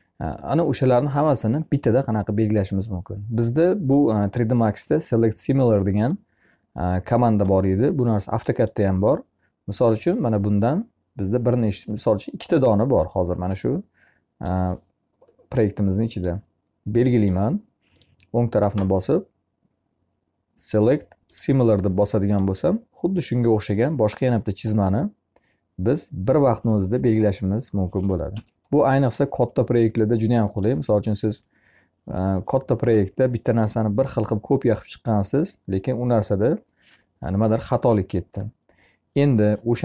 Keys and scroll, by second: 27.7 Escape.